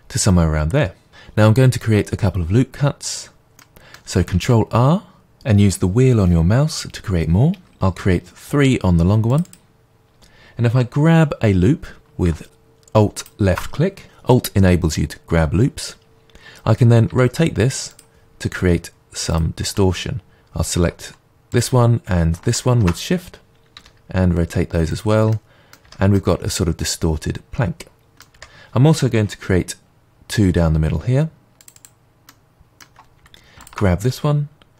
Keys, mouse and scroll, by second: 3.6-9.5 middle drag, 4.3 ctrl+r, 9.5 click, 13.2 alt+click, 17.1 r, 17.9 click, 19.3-23.7 alt+drag, 23.7 r, 24.9 click, 25.3-31.8 middle drag, 25.8 Tab, 28.3 Tab, 29.8 ctrl+r, 31.8 click, 32.3-33.6 middle drag, 33.6-34.7 alt+drag.